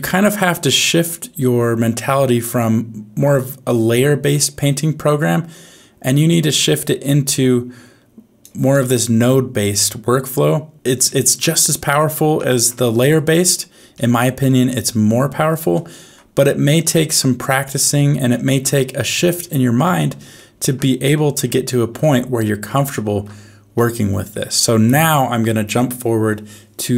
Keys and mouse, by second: 9.2-10.7 middle drag, 11.0 shift+middle click, 12.3 shift+middle click, 13.3 middle click, 13.9 shift+middle click, 14.4 middle click, 15.7 shift+middle click, 16.9 shift+middle click, 17.5 middle click, 18.3 shift+middle click, 19.4 shift+middle click, 20.3 shift+middle click, 21.1 middle click, 21.7 shift+middle click, 22.9 shift+middle click, 23.7 middle click, 24.6 shift+middle click.